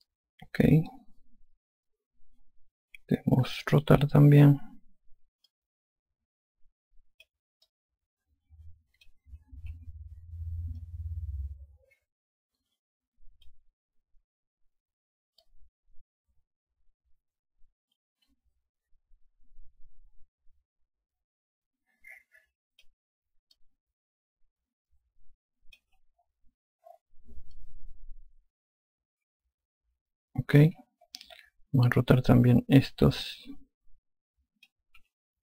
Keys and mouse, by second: 6.3 click, 8.5 alt+click, 10.5 r, 11.6 alt+click, 16.3 click, 24.4 alt+click, 28.4 alt+click, 33.1 alt+click.